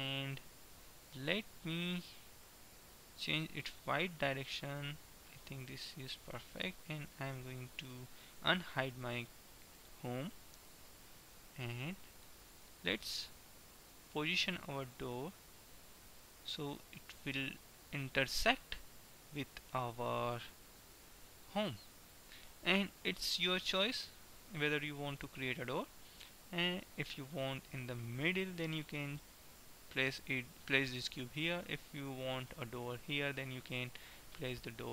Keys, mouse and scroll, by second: 2.6 middle click, 4.1-5.9 drag, 8.6 alt+h, 9.2-10.7 middle drag, 10.7-12.6 right drag, 12.1-13.9 drag, 17.6-19.2 drag, 21.1 KP_1, 23.9-25.7 drag.